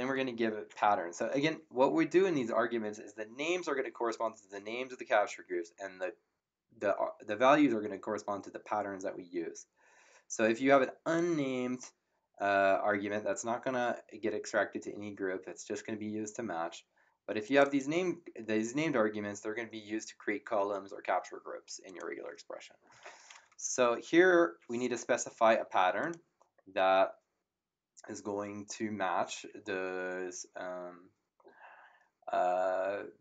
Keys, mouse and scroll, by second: 11.1 click, 17.4 click, 21.8 click, 26.0 click.